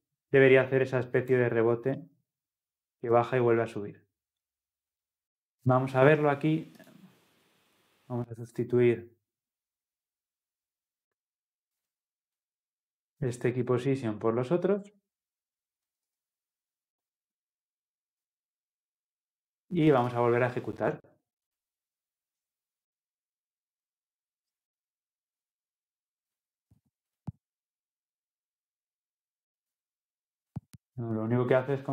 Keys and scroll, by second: 2.0 ctrl+c, 16.1 ctrl+v, 20.0 ctrl+v, 20.1 ctrl+F10.